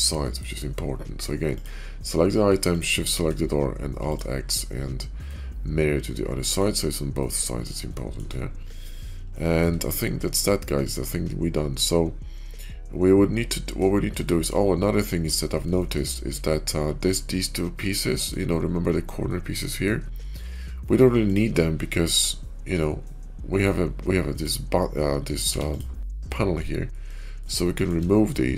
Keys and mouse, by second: 0.0 middle click, 1.3 click, 2.5 shift+click, 5.2-6.5 middle drag, 7.1-7.6 middle drag, 7.8-8.1 shift+middle drag, 9.2 shift+middle click, 10.3-13.7 middle drag, 14.1 shift+middle click, 14.7-15.2 middle drag, 15.7 shift+middle drag, 18.0 middle drag, 19.2 middle click, 20.1 shift+middle drag, 21.1 click, 21.9 g, 24.1 click, 25.4 x, 26.2-26.8 drag, 27.0 shift+middle click, 27.5 shift+middle click, 28.0 middle click.